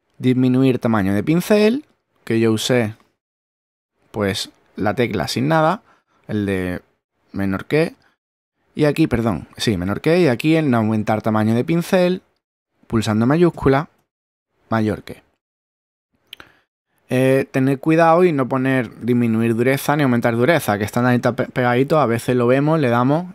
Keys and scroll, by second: 2.4 <, 13.5 shift+<.